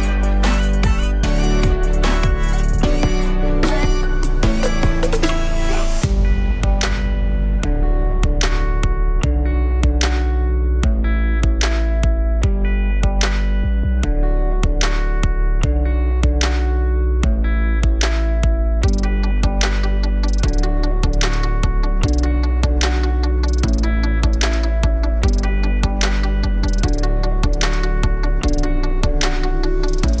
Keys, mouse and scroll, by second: 2.7 middle click, 3.7-5.6 drag, 5.6 KP_0, 9.8 click, 11.2-13.8 drag, 23.8 click, 24.7-27.2 drag, 27.6-28.0 scroll down 1, 28.0 middle click, 28.3-28.6 scroll up 1, 28.6 middle click, 29.3-30.2 drag.